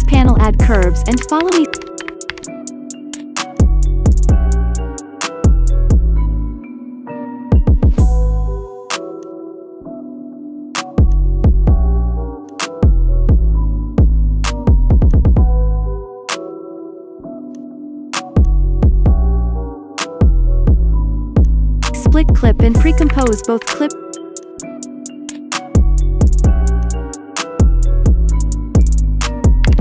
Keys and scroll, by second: 0.8-2.2 typing, 23.6 ctrl+shift+d, 29.7 0.